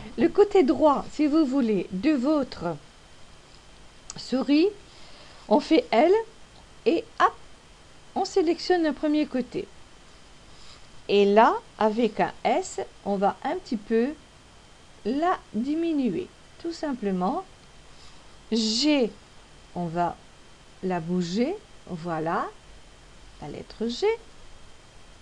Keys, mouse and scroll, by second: 7.5 l, 7.5 m, 14.8 s, 20.7 g.